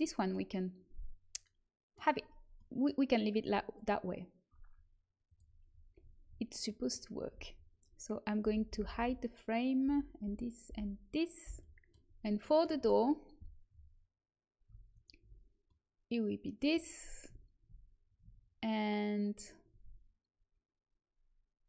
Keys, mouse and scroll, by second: 0.8-1.8 middle drag, 2.2-3.4 middle drag, 5.2 click, 5.8 right click, 6.1 click, 6.6 middle click, 7.2 a, 8.3-11.4 typing, 14.9-21.0 middle drag.